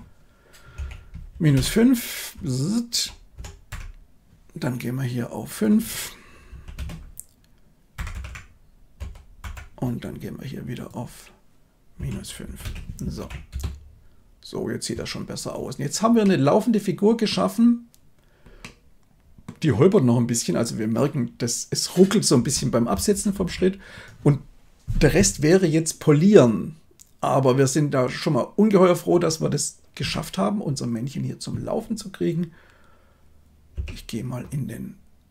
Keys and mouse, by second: 2.3 Right, 2.8 Right, 2.8 Right, 2.9 Right, 3.3 Right, 3.6 Up, 5.6-6.8 drag, 7.9 Up, 8.0 Up, 8.9 Up, 8.9 Right, 9.3 Left, 10.7-12.6 drag, 13.1 shift+Left, 13.4 space, 16.1-17.2 middle drag, 18.5-19.4 middle drag, 22.3 space, 23.3 shift+Left, 29.9 KP_1, 33.6 Tab.